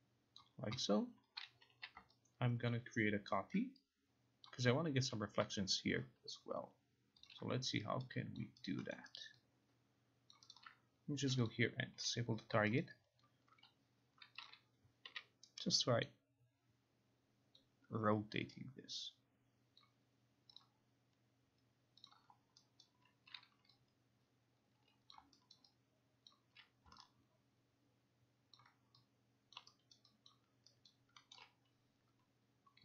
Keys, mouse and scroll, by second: 0.5 click, 1.8 e, 2.8 ctrl+click, 4.5 click, 7.3 click, 8.1-9.3 alt+right drag, 9.3 alt+middle click, 9.9 right click, 10.5 alt+click, 11.6 click, 12.1 Delete, 12.9 alt+right click, 13.3 alt+click, 14.6 click, 17.7 click, 19.9 click, 20.7 click, 22.1 click, 22.9 click, 22.9 alt+right click, 25.2 click, 25.6 alt+right click, 26.4 alt+click, 28.6 alt+click, 29.6 click, 30.1 alt+right click, 30.4 alt+click, 31.4 alt+middle click, 31.4 alt+right click.